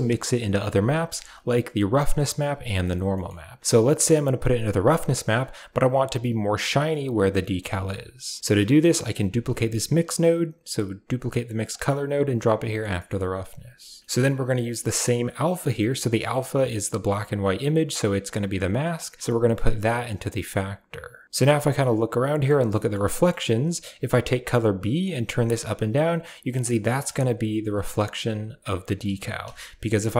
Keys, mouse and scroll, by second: 0.3 click, 0.6 g, 0.9 a, 1.0 right click, 1.3 g, 2.5 right click, 3.0 middle click, 4.3 click, 5.0 shift+middle drag, 7.3 shift+middle drag, 8.6 right click, 9.1 shift+d, 11.7 click, 12.8 middle click, 14.8 drag, 18.8-20.7 drag, 21.2-22.3 middle drag, 22.6 middle click, 23.0 middle click, 23.9 click, 26.8 middle click, 28.0 click, 28.9 middle click.